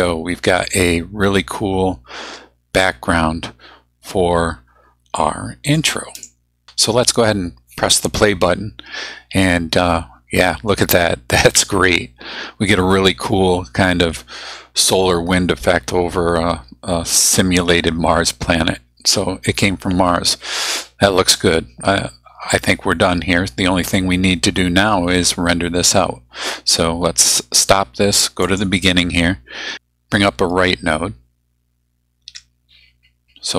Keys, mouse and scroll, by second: 5.7-6.4 drag, 27.2 click, 28.4 click, 32.3 Tab.